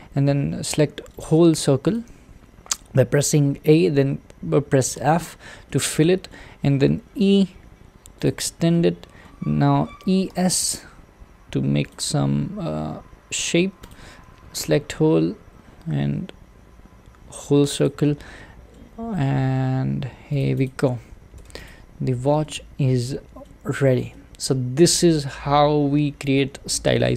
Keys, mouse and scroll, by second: 1.2 click, 2.1 a, 5.0 f, 5.7-7.2 middle drag, 7.2 e, 8.7-10.0 middle drag, 10.0 e, 12.2 e, 13.9 click, 14.2 a, 14.7 s, 18.0-19.4 middle drag, 19.4 g, 20.7 click, 21.4 Tab, 21.7 click, 22.0-22.4 scroll down 1, 22.4-23.6 middle drag, 23.6-24.1 scroll down 3, 24.1-25.2 middle drag, 25.2-26.1 scroll up 1, 26.1-26.7 scroll up 3, 26.7-27.1 shift+middle drag.